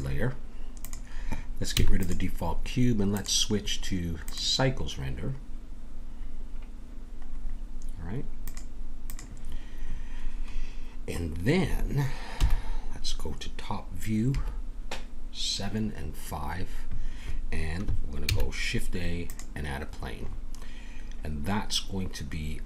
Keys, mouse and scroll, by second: 0.8-4.9 drag, 1.7 x, 8.5-10.1 drag, 12.3 KP_7, 14.3 KP_5, 18.2 shift+a, 20.3-21.4 scroll up 1, 21.4-22.6 scroll up 1.